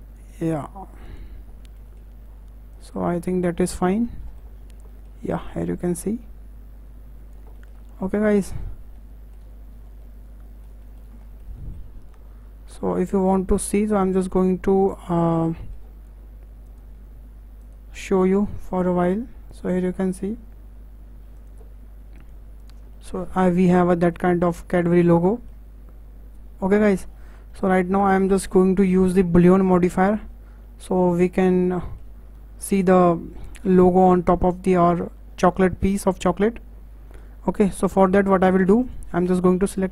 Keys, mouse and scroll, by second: 1.8-2.7 shift+middle drag, 2.7 click, 3.8 scroll down 4, 4.0 middle click, 4.5-4.9 scroll up 6, 4.9-5.9 shift+middle drag, 5.9 click, 7.5-8.6 shift+middle drag, 8.6-8.9 scroll down 4, 8.9-9.8 middle drag, 9.8 scroll down 1, 10.0-13.7 middle drag, 13.7 click, 14.2-15.2 right drag, 15.2-15.6 scroll up 5, 15.6-16.6 shift+middle drag, 16.6 click, 17.6-19.1 drag, 19.5 click, 21.3 click, 22.2 click, 22.9-24.4 middle drag, 24.4-24.7 scroll up 2, 24.7-26.8 shift+middle drag, 26.8 scroll up 2, 27.1-27.9 scroll down 7, 27.9-32.2 middle drag, 32.2-32.8 scroll up 3, 32.8-34.3 middle drag, 34.3 scroll down 1, 34.5-35.2 middle drag, 35.2-35.7 scroll down 2, 35.7-37.4 shift+middle drag, 37.4 scroll up 2, 37.6-38.8 shift+middle drag, 38.8 click.